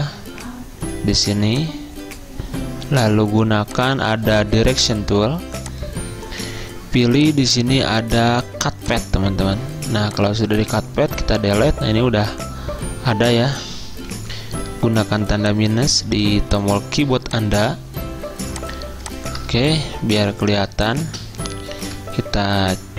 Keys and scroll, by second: 11.2 Delete, 14.4 -, 20.0 z, 21.9 -.